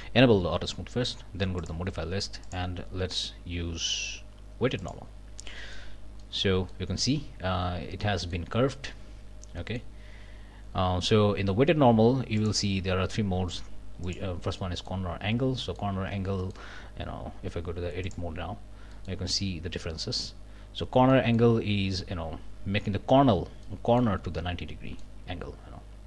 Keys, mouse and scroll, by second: 1.6 click, 2.4 click, 4.8 click, 5.6 middle click, 5.9 scroll up 1, 6.2 middle click, 8.0 click, 9.6 click, 12.4 click, 14.0 click, 14.6 click, 15.2 scroll down 1, 15.6 click, 16.1 Tab, 16.4 click, 18.0 click, 18.6 scroll up 1, 18.9 click, 21.1 click, 23.6 click, 24.4 click.